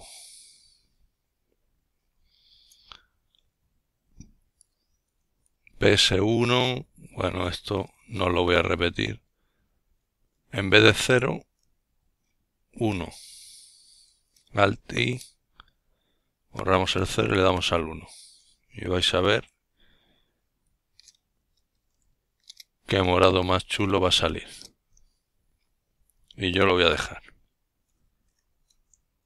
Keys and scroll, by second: 2.9 alt+i, 5.3 Delete, 5.9 1, 7.7 Escape, 9.4-10.3 typing, 10.9 Return, 11.7-13.1 typing, 16.7 ctrl+alt+t, 25.9 typing.